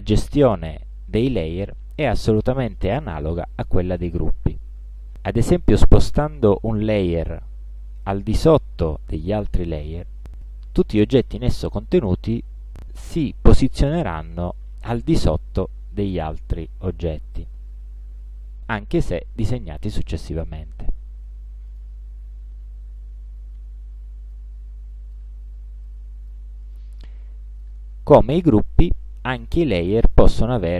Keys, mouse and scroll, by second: 6.3 click, 8.0-9.4 drag, 9.7-10.8 drag, 16.5 click, 18.1 click, 19.1-20.8 drag, 21.8 click, 24.4-25.4 drag, 25.9-26.5 drag, 26.8-27.9 drag.